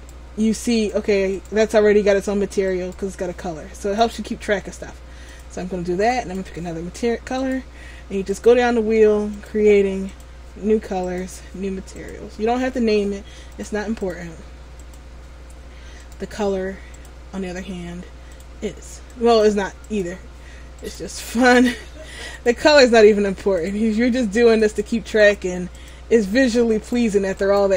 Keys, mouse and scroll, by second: 0.1 right click, 4.1 click, 7.6 right click, 8.4 click, 11.2 right click, 12.1 click, 16.1 right click, 17.1 click, 21.0 right click, 22.4 click, 26.9 right click.